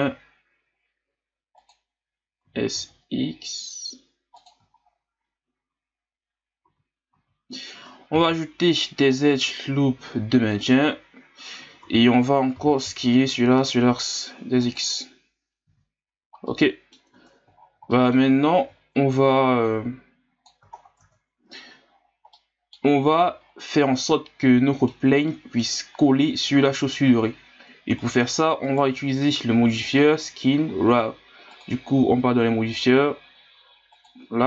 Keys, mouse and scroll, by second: 2.4 s, 4.7-5.1 scroll up 2, 6.6 z, 7.1 z, 8.1 ctrl+r, 11.6 a, 11.8 a, 12.5 s, 15.7 z, 16.1 scroll down 2, 16.5 middle click, 17.0 Tab, 17.6-17.9 scroll down 1, 17.9 middle click, 18.6 Tab, 19.4-20.7 drag, 20.7 scroll down 3, 21.0 Tab, 22.3-23.4 middle drag, 23.4-24.4 scroll up 3, 24.4-28.0 middle drag, 28.0 right click, 28.6 right click, 29.9-33.0 drag, 33.9 click.